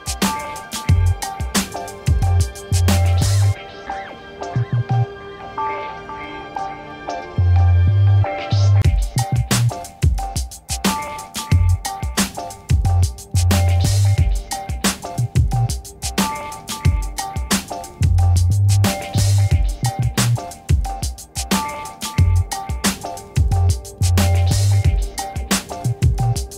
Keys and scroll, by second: 3.1 0, 4.7 c, 6.0 Return, 23.0 v.